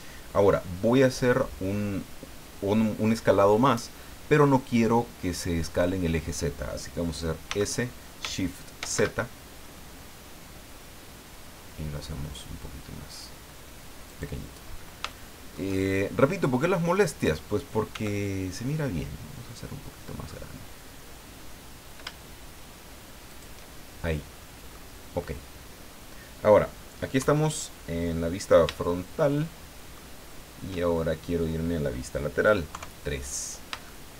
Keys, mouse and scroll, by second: 7.4 s, 8.8 shift+z, 14.1 click, 14.6 scroll up 2, 15.1 shift+middle click, 15.8 shift+scroll up 2, 17.9 s, 23.3 shift+click, 24.3 scroll down 2, 24.7 middle click, 25.7 scroll down 2, 27.2 KP_1, 28.8-30.1 shift+middle drag, 30.9 shift+scroll up 2, 32.7 KP_3, 33.8 shift+middle click.